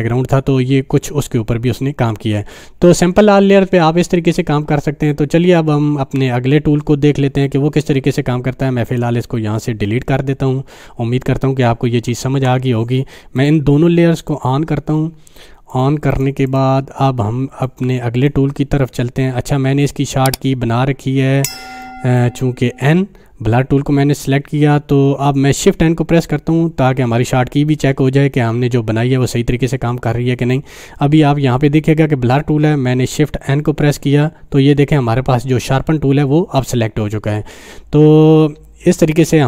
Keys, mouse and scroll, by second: 8.9 click, 12.3 Delete, 13.3 click, 16.1 right click, 16.5-18.6 drag, 22.0-22.4 click, 33.9 shift+n.